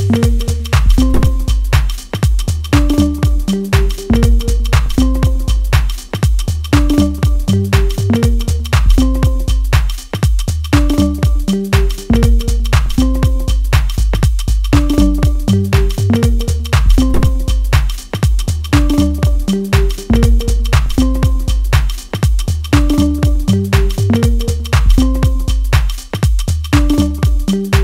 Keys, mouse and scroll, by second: 5.2 ctrl+z, 7.9 middle click, 8.8-9.2 scroll down 1, 9.3-12.8 shift+middle drag, 13.2 shift+scroll up 1, 13.3 shift+middle click, 14.4-23.3 drag, 23.3 ctrl+z, 24.0-27.8 drag.